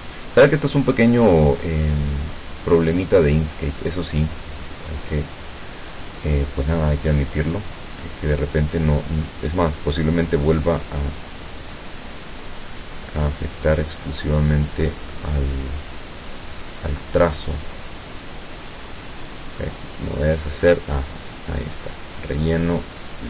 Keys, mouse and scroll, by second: 0.3 click, 0.9 click, 1.5 click, 2.3 click, 7.5 click, 12.5 click, 13.6 click, 18.1 click, 19.5 click, 21.4 click, 22.7 click.